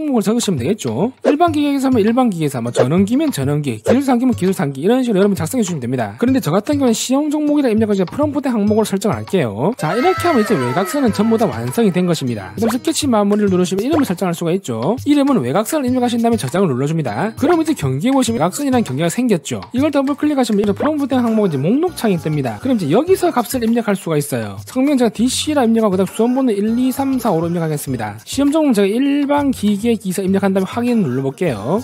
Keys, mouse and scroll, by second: 13.5 click, 15.0-16.3 typing, 20.4 click, 20.5 click, 25.7-31.1 typing.